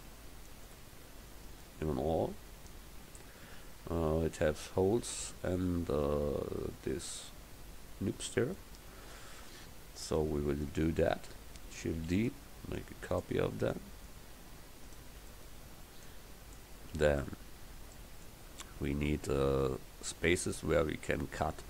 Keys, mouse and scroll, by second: 12.0 shift+d, 14.9 right click, 16.1 middle click.